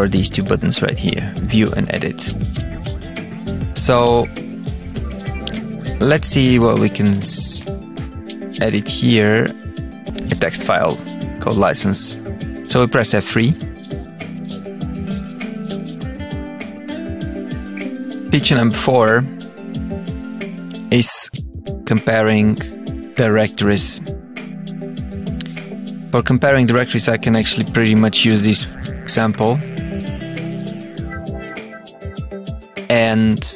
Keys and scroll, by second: 2.7 Down, 3.8 Return, 4.5 Return, 4.5 Up, 5.2 Down, 5.5 Return, 7.0 Return, 7.3 Down, 8.6 Return, 9.8 Page_Up, 10.0 Return, 10.1 Down, 25.9 Tab, 26.6 Return, 27.1 Tab, 27.4 Page_Up, 27.5 Return, 28.2 Page_Up, 28.3 Return, 28.7 Tab, 29.2 Page_Up, 29.8 space, 30.5 space, 30.7 Down, 31.0 Tab, 31.6 Return, 32.0 Down, 32.7 Page_Up, 32.8 Return.